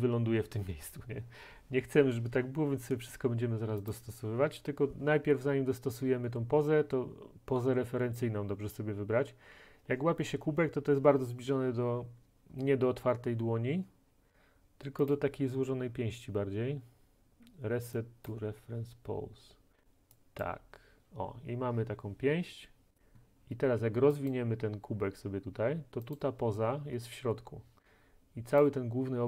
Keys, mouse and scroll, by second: 4.0 click, 15.2 click, 18.3 click, 20.5 middle click, 24.4 click, 26.2 click, 28.7 click.